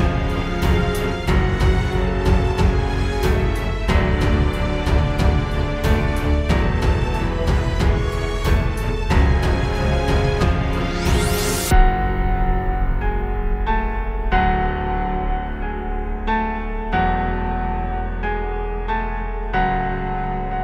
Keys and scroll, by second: 12.2 space, 12.7 space.